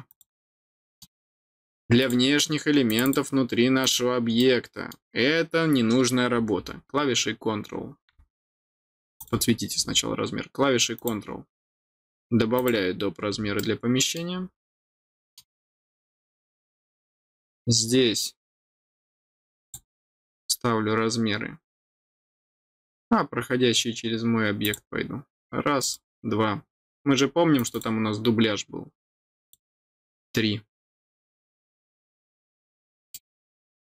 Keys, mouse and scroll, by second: 0.0 click, 0.7 middle click, 2.0 click, 2.8 click, 3.0 click, 3.8 click, 4.3 middle click, 9.1 click, 10.9 click, 12.5 click, 13.5 middle click, 14.8 middle click, 15.6 middle click, 19.6 click, 24.6 click, 25.8 click, 27.5 click, 27.7 click, 29.4 click, 32.0 middle click, 33.1 middle click.